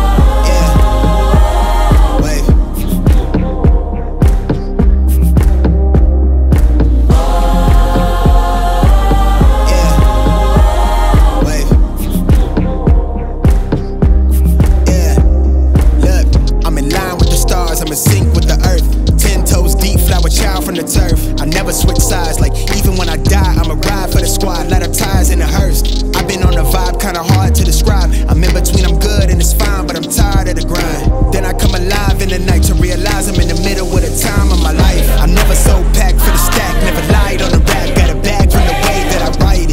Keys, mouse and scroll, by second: 0.0-3.1 drag, 15.5-16.4 drag.